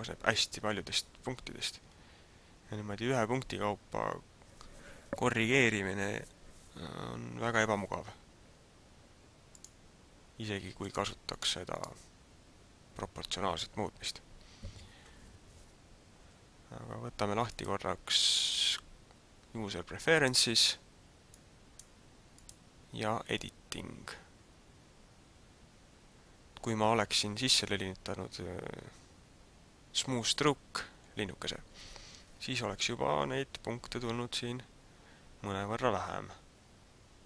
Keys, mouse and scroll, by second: 1.9-2.5 scroll down 2, 9.5 click, 11.2 click, 11.7 click, 17.7 click.